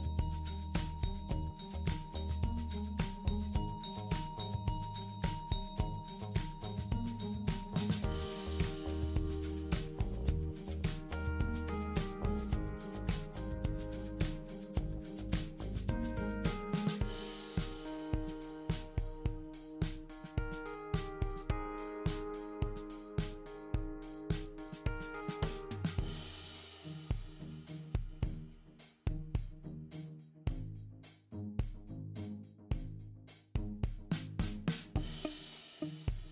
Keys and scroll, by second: 5.2 super+a, 7.6 BackSpace, 12.0 ctrl+z, 13.1 super+z, 18.0 ctrl+y, 19.7 super+y, 25.7 w, 26.0 w, 31.0 w, 34.7 ctrl+g, 35.8 super+g.